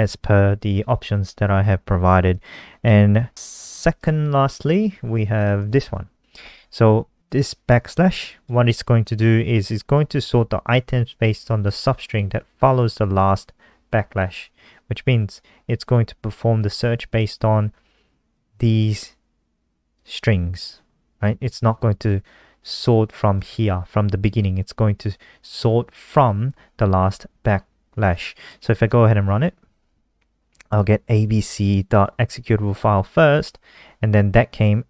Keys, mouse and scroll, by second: 2.2 click, 3.2-3.6 scroll down 1, 3.6 ctrl+c, 3.9 click, 4.6 click, 5.5 ctrl+v, 7.1 click, 23.3 click, 25.5 click, 28.5 ctrl+s, 28.8 F5.